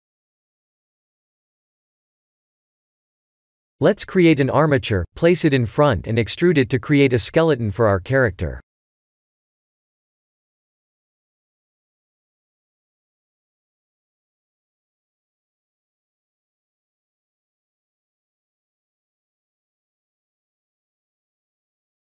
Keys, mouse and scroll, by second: 0.0 ctrl+j, 0.5 click, 1.2 click, 1.9 ctrl+click, 2.5-3.7 scroll down 7, 4.8 click, 5.2 click, 6.2 shift+a, 16.1 click, 17.3 click.